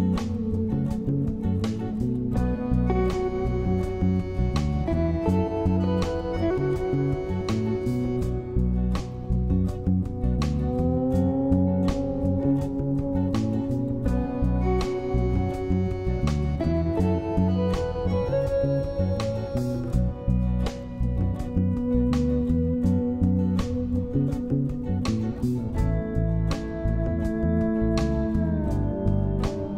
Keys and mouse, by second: 1.1-1.5 shift+middle drag, 2.1 middle click, 3.0 Tab, 4.8 click, 6.0 shift+d, 11.2 g, 14.0 click, 14.7 shift+middle click, 19.4 click, 20.3 Tab, 21.6 Tab, 22.1-22.9 drag, 23.7 shift+click, 26.8 ctrl+z, 26.8 g, 28.3 shift+middle click.